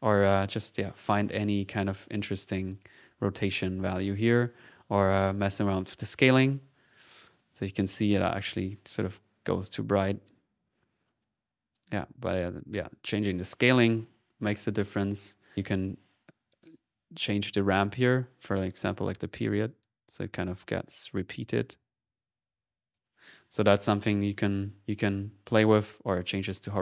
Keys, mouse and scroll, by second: 0.3-4.0 drag, 4.8 click, 5.4-7.2 drag, 7.3 click, 7.4 ctrl+1, 8.1-9.1 drag, 9.2 click, 10.2 click, 13.4 click, 14.5 ctrl+z, 14.5-14.8 typing, 16.7-23.1 drag, 23.7 ctrl+z, 25.5 click, 26.2 click.